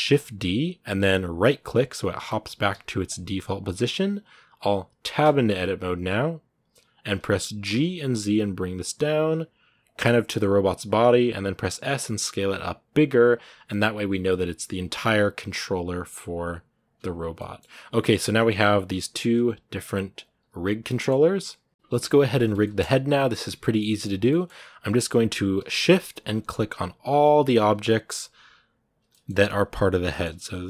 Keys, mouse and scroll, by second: 17.0 scroll down 1, 17.1 middle click, 17.8 g, 18.4 scroll up 3, 19.0 right click, 19.1 g, 20.0 right click, 20.2 g, 20.6 scroll down 1, 20.6 middle click, 21.0 a, 21.7-22.4 scroll up 1, 22.4-24.9 shift+middle drag, 24.9-27.1 right drag, 27.1 g, 27.8-28.8 shift+right drag, 28.8 scroll up 1, 28.9 middle click, 29.1 g, 29.9 middle click, 30.5-30.6 shift+right drag.